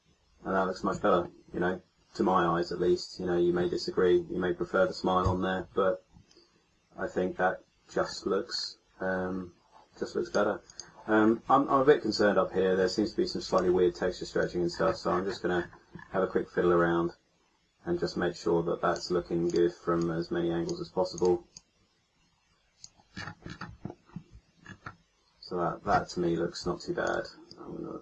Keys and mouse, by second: 2.9 middle click, 5.1 KP_1, 11.1-12.6 middle drag, 12.7 middle click, 13.4-15.1 right drag, 14.3-18.9 drag, 19.4-23.1 drag, 20.0-23.1 right drag, 27.0-28.0 middle drag.